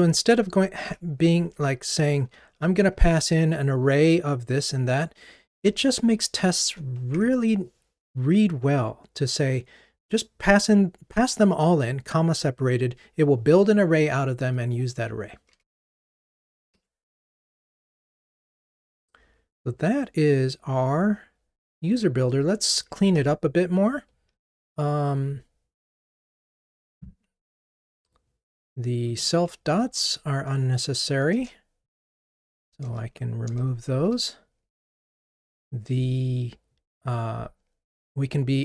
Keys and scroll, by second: 16.0 super+BackSpace, 16.6 ctrl+r, 23.1 ctrl+Tab, 29.9 alt+Return, 34.1 ctrl+r.